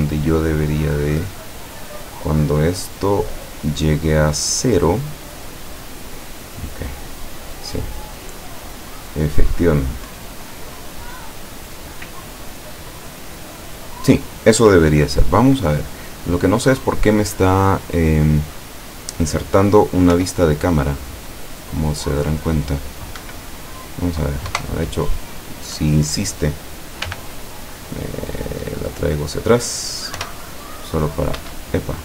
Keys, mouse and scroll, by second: 2.4-3.2 middle drag, 3.6 click, 7.5 click, 8.7 click, 9.4-11.3 middle drag, 16.0-16.8 middle drag, 16.9 scroll down 2, 17.3-18.5 middle drag, 20.2 p, 23.3 Escape, 24.6 KP_0, 26.1 right click, 27.1 g, 27.4 middle click, 29.1 click, 30.3 p, 31.5 Escape.